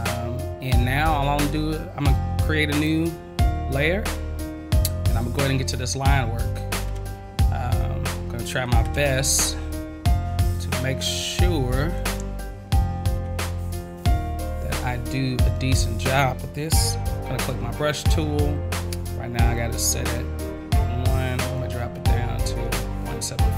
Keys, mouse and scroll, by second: 2.7 click, 8.0-8.7 scroll up 1, 9.8 scroll up 1, 11.0 scroll up 1, 21.5 click, 22.6 click.